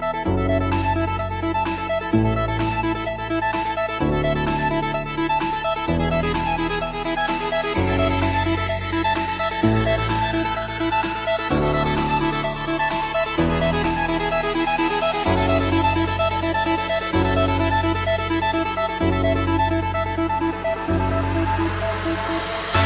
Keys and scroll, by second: 21.8 alt+BackSpace.